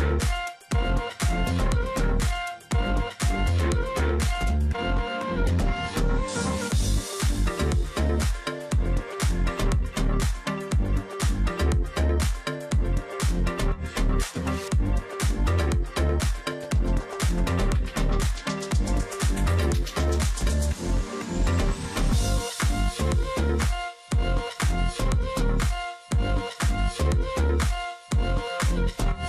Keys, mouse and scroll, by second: 0.0-0.4 alt+scroll down 1, 0.4 space, 0.7 alt+scroll up 1, 1.0 space, 1.3 alt+scroll down 1, 1.6-2.0 alt+scroll up 1, 2.1 space, 2.4-2.9 alt+scroll up 1, 4.2 space, 5.5 double click, 6.6 double click, 7.6 alt+scroll up 1, 7.7 space, 9.3 double click, 9.5 ctrl+click, 9.7 alt+scroll down 1, 10.0 space, 10.4 alt+scroll up 1, 10.9 space, 13.5 alt+scroll down 1, 14.1 space, 14.4 alt+scroll up 1, 16.1 double click, 19.6 double click, 21.7 ctrl+click, 22.2 space, 22.8-23.2 alt+scroll up 1, 23.2 ctrl+click, 23.5-23.8 alt+scroll up 1, 23.8 ctrl+click, 24.2 space, 26.8 ctrl+z, 28.2 double click.